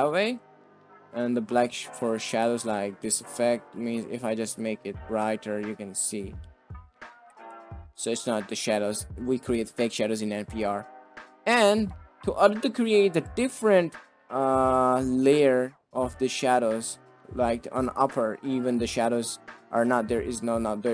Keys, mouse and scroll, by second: 0.3 click, 1.2 click, 2.4 shift+drag, 3.0 shift+middle drag, 5.8 middle drag, 6.5 shift+middle drag, 6.7-7.0 middle drag, 7.3 ctrl+z, 7.6 shift+drag, 10.3 drag, 11.0 click, 11.5 middle click, 13.3 middle click, 13.4 click, 13.5 middle click, 13.6 click, 13.9 middle click, 14.7 middle drag, 15.3 click, 15.5 click, 16.4-19.3 drag, 20.2 click.